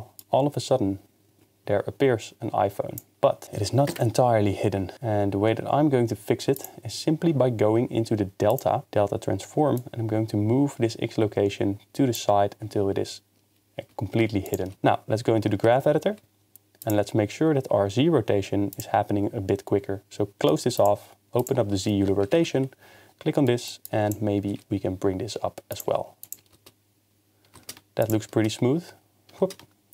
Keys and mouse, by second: 3.9 KP_0, 8.5 click, 9.9-12.2 shift+drag, 12.6 shift+space, 14.4 click, 15.6 ctrl+Tab, 16.8 click, 18.7 click, 20.8 click, 21.4 click, 22.2 a, 22.3 KP_Decimal, 23.9 click, 24.5 g, 26.2 click, 26.5 shift+space, 28.0 click.